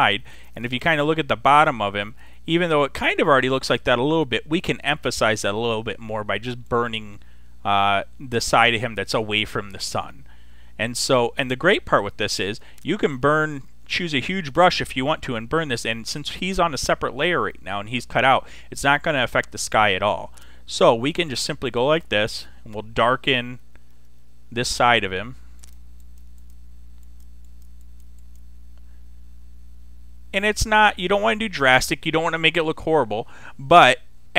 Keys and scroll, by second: 12.5 ], 23.5 [.